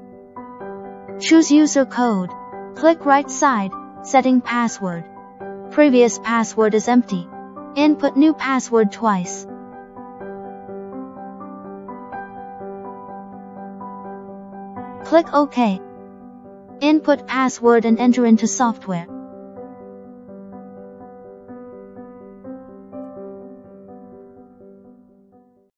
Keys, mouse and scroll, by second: 1.9 click, 2.4 click, 3.6 click, 4.7 click, 7.1 click, 12.0 click, 16.2 click, 17.2 click, 21.6 click, 22.7 click.